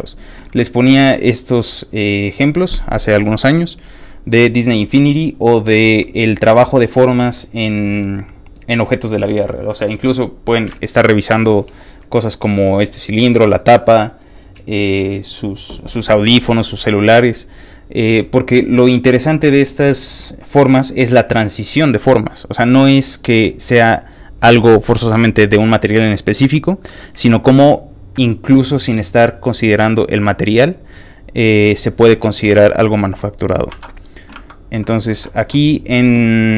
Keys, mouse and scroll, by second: 32.7 click, 33.7 alt+Tab.